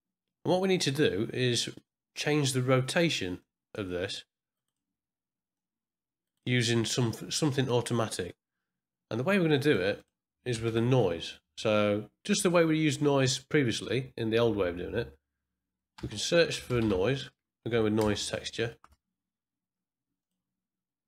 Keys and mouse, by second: 3.4-4.7 drag, 5.5 click, 9.5 click, 9.9 click, 10.6 shift+a.